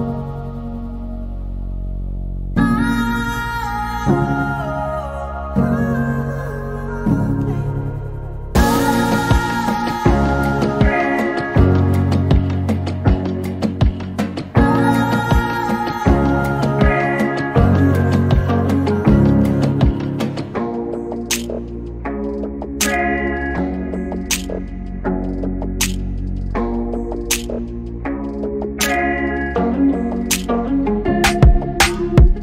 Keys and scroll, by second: 6.1 c, 7.7-9.2 typing, 10.4 p, 13.9-15.1 typing, 17.7 m, 23.2-24.1 typing, 25.3 typing, 31.1 m.